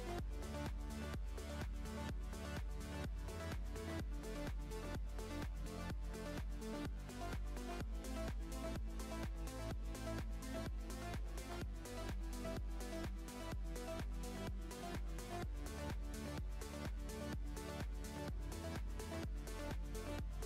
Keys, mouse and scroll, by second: 2.9 middle click, 3.4 click, 3.8-4.5 scroll down 5, 4.5-5.8 middle drag, 5.8-6.2 scroll up 2, 6.2 middle click, 6.9 ctrl+r, 8.9-9.4 scroll up 1, 9.4-9.8 scroll up 1, 9.8 ctrl+b, 13.2-13.5 scroll up 2, 13.5 middle click, 13.9-14.8 scroll up 3, 14.8-15.9 drag, 15.9 alt+s, 18.6 scroll down 1, 19.2 click, 19.2 scroll down 4, 19.9 middle click.